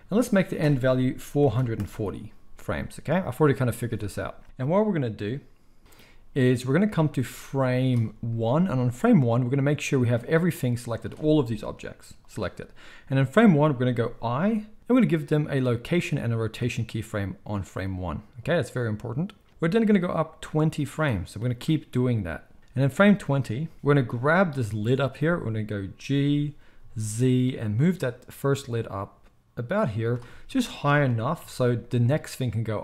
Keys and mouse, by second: 1.4 4, 11.7 g, 14.4 i, 24.4-32.8 middle drag, 26.2 g, 31.0 g.